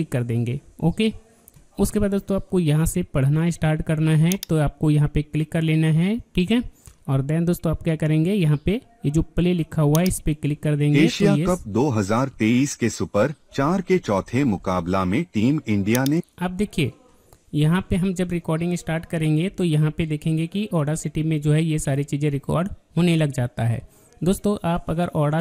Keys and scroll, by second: 20.1 alt+Tab.